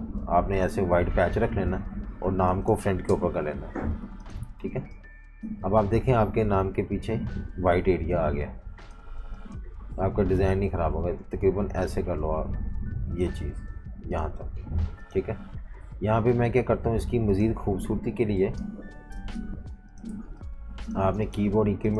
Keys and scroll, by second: 1.2 v, 1.6 super+3, 3.0 shift+super+], 3.5 alt+super+3, 4.0-6.3 typing, 17.9-18.4 scroll up 1, 18.4 scroll down 1, 19.1 super+-, 19.3 super+-, 20.1-21.9 typing.